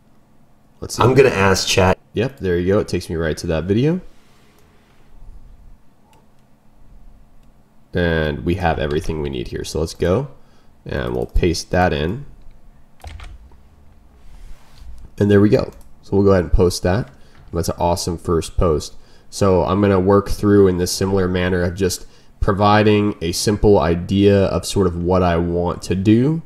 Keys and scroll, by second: 8.7 ctrl+m, 11.4 ctrl+m.